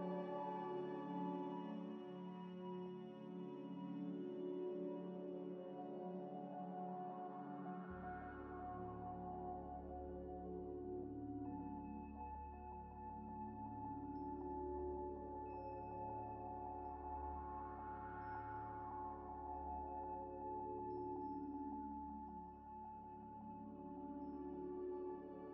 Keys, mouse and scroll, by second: 4.0 scroll up 1, 4.7 z, 4.9 scroll up 1, 5.0 middle click, 8.8-9.3 scroll down 1, 9.3 scroll up 1, 9.6 scroll down 1, 10.2 middle click, 11.0 scroll up 1, 11.4 Tab, 11.9 2, 12.7 alt+click, 13.5 alt+click, 13.8 Tab, 14.1 Tab, 14.5 Tab, 16.3 scroll down 1, 16.9 scroll up 1, 17.0 scroll down 1, 19.2 scroll up 1, 23.0 scroll down 1, 25.4 scroll down 1, 25.4 scroll up 1, 25.4 scroll down 1.